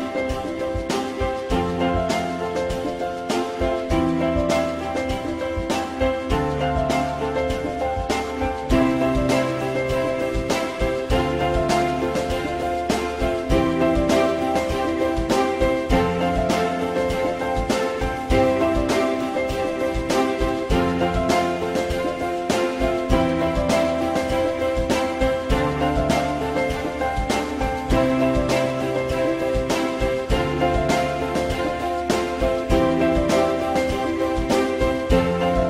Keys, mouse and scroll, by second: 0.1 alt+middle click, 0.9 alt+middle click, 1.1 alt+double middle click, 6.1 shift+click, 7.0 shift+double click, 7.7 shift+click, 11.3 ctrl+z, 14.7 alt+middle click, 25.7 alt+middle click, 28.6 ctrl+click, 30.5 ctrl+click.